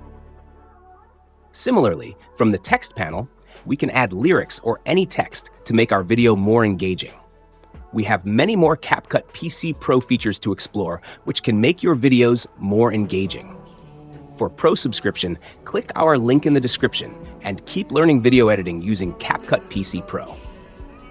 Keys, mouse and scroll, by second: 0.2-1.2 drag, 2.2 click, 4.4 click, 10.0 click, 12.3 click.